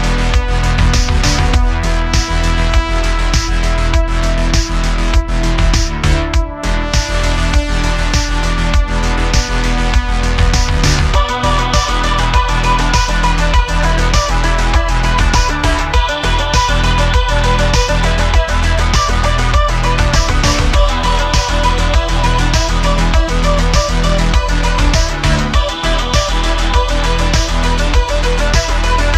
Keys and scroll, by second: 2.7 Tab, 3.0 q, 7.6 super+z, 8.0 q, 9.4 q, 11.6 s, 15.9 shift+d, 16.1 y, 22.5 shift+a, 26.5 s, 26.6 z.